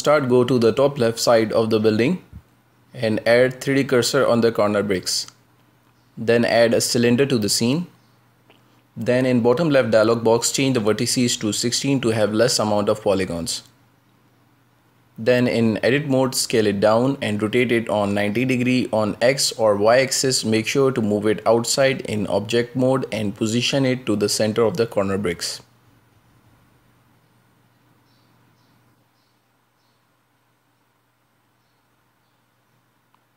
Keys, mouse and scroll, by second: 0.0 click, 0.6 shift+`, 2.2 middle click, 2.5 middle click, 2.7 middle click, 2.9 middle click, 3.1-3.5 middle drag, 5.7 click, 7.0 shift+a, 11.2 click, 12.3-15.3 drag, 15.5 click, 16.8 Tab, 17.7 s, 20.0 s, 20.6 r, 24.6 s, 26.7 KP_Decimal, 27.0 middle click, 27.3 scroll down 4, 27.8 right click, 28.5 a, 28.7 g, 31.1 Tab, 31.4 g.